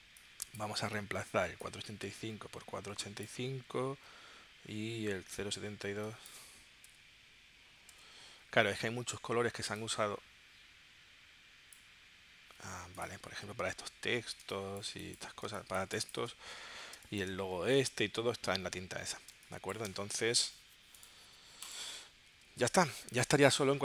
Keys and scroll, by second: 6.8-8.6 typing, 14.4 space, 15.5 space, 16.9 space, 19.3 space, 22.6 super+s.